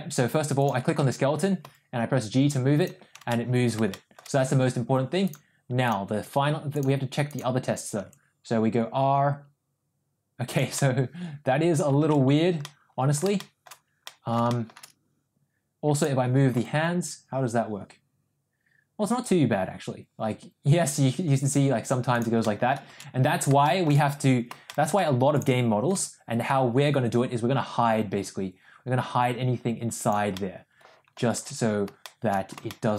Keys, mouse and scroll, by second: 1.3 ctrl+z, 1.8 g, 3.6 ctrl+z, 3.9 shift+middle click, 5.3 click, 6.9 click, 7.6 click, 8.1 r, 10.8-11.8 middle drag, 12.4 ctrl+z, 12.7 middle click, 13.4 shift+middle click, 14.1 middle click, 14.5 shift+middle click, 16.7 g, 22.5 middle click, 23.3 ctrl+z, 23.7 shift+middle click, 24.7 shift+middle click, 25.6 click, 26.1 g, 30.5-31.2 middle drag, 31.8 ctrl+z, 32.0 shift+middle drag, 32.7 shift+middle drag.